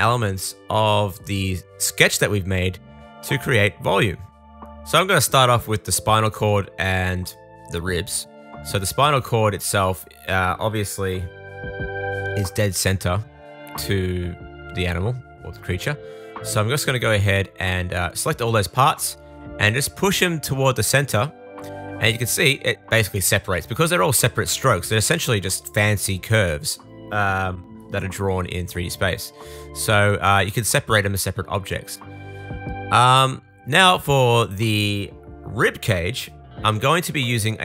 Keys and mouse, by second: 2.3-7.9 drag, 8.2 click, 8.4 shift+middle click, 8.8 click, 9.2 shift+middle click, 10.0 click, 10.1 shift+middle click, 11.0-13.3 shift+drag, 11.5 KP_3, 12.2-13.3 super+right drag, 13.2 super+z, 14.7 super+l, 16.2 super+l, 17.3 super+middle click, 17.5 super+l, 18.6 super+l, 28.0-34.5 middle drag, 36.9-37.6 middle drag.